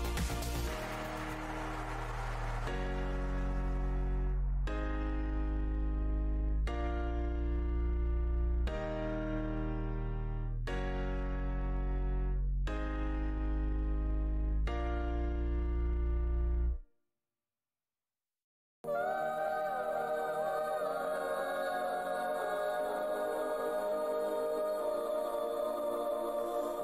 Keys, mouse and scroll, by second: 0.1 right click, 0.5 click, 1.9-2.3 alt+scroll up 2, 1.9 shift+x, 4.8 alt+click, 5.7 click, 7.4 alt+scroll down 1, 8.0 alt+click, 8.5 click, 9.1-9.4 scroll down 1, 9.9 click, 13.4 e, 14.2 click, 15.2 z, 15.4 scroll, 16.2 click, 16.8-17.3 alt+scroll, 17.3-17.7 alt+scroll down 1, 17.7 alt+scroll, 19.2 w, 21.0 alt+h, 21.2 f, 21.6 alt+Tab, 22.9 Tab, 24.3 click, 24.9 Tab, 25.9-26.4 scroll down 1.